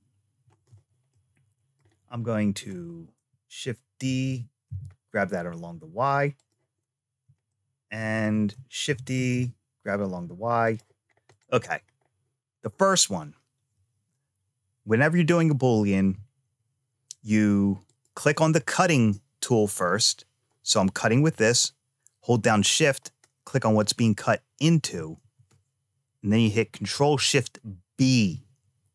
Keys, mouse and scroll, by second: 0.8 scroll down 1, 0.9 scroll up 1, 1.0 middle click, 1.7 scroll up 1, 2.0 click, 3.8 shift+d, 7.3 shift+middle click, 8.7 shift+d, 11.1 click, 11.5 scroll down 3, 17.7 click, 22.9 shift+click, 26.7 ctrl+shift+b.